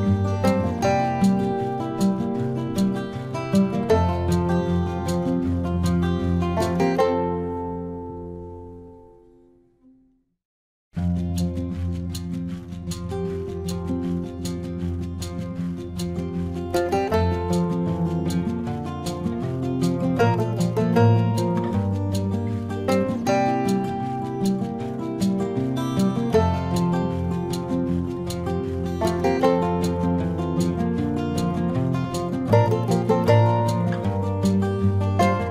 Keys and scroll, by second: 4.8 space, 8.2 space, 11.9 space, 14.4 space, 16.8 space, 21.5 ctrl+-, 22.1 space, 22.7 ctrl+-.